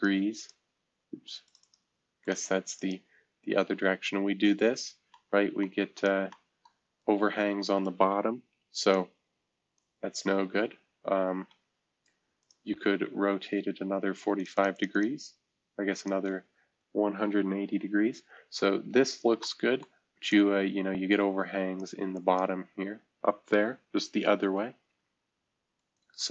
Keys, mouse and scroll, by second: 0.4 click, 1.4-7.0 drag, 7.0-8.9 right drag, 8.9 click, 11.2 F2, 12.4 click, 14.4 click, 14.5 click, 14.7 click, 14.9 click, 16.0 click, 18.8 shift+F2, 20.3-24.2 drag, 24.2 shift+F2, 25.0 F2, 25.8-26.3 drag.